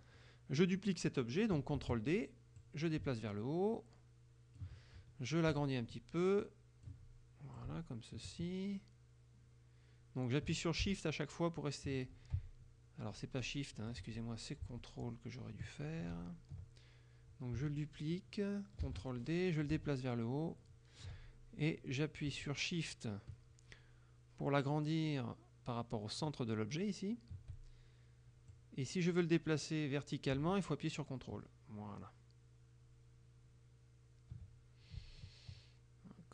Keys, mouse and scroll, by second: 0.0 middle click, 1.8 ctrl+f, 2.7-4.8 drag, 5.6-7.1 shift+drag, 7.6-14.2 shift+drag, 14.1 ctrl+z, 16.2 ctrl+z, 18.9 ctrl+d, 19.7 ctrl+click, 22.5-26.5 shift+drag, 28.6-36.3 drag.